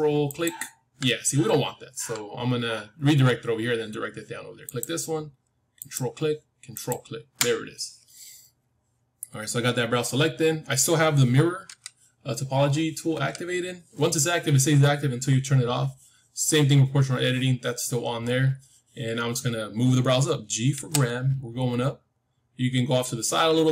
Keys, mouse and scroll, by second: 4.6-8.7 drag, 11.6 n, 13.0 n, 20.7 g.